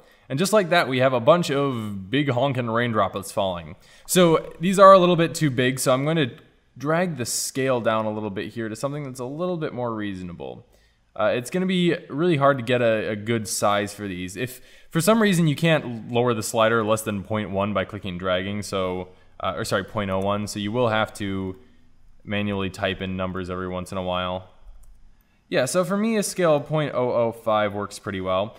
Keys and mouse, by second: 2.1-3.7 middle drag, 6.2-7.2 drag, 12.7-13.1 middle drag, 14.5-15.7 middle drag, 15.7 click, 15.8 middle click, 15.8 click, 16.0-17.5 drag, 18.5-20.2 drag, 21.6 click, 22.3 KP_0, 24.8 KP_0, 25.3 KP_0, 28.3 click.